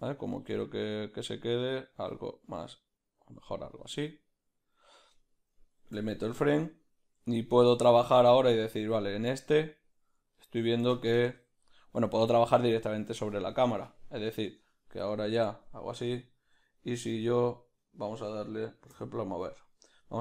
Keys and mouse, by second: 7.2 Left, 9.0 Right, 10.3-20.2 ctrl+middle drag, 15.2 b.